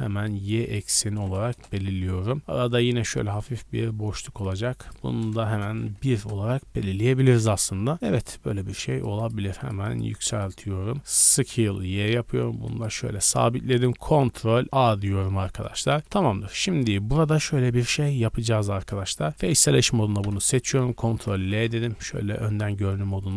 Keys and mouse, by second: 6.2-12.9 drag, 11.3 s, 12.9-14.7 middle drag, 14.6 ctrl+a, 15.2-15.6 shift+middle drag, 16.2 Tab, 19.1 3, 20.2 ctrl+l, 21.1 ctrl+l, 22.0 KP_3.